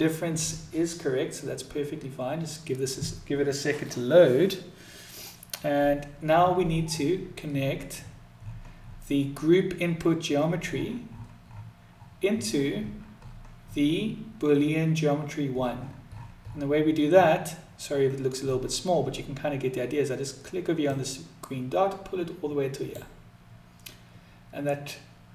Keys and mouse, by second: 20.6-23.9 drag.